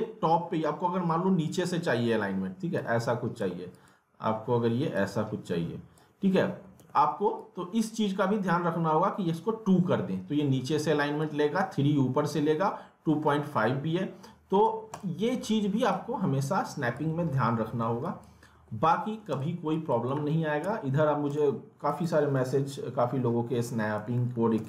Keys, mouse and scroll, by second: 2.8-6.8 drag, 6.8 ctrl+z, 7.4-17.3 drag, 17.3 alt+middle click, 18.0 click, 18.5 w, 18.9 alt+middle click, 19.3 click, 20.2 alt+w, 20.6 z, 20.9 scroll down 1, 21.3 click, 22.3 middle click, 22.7-23.1 scroll up 1, 23.4-24.5 typing, 24.1 alt+w.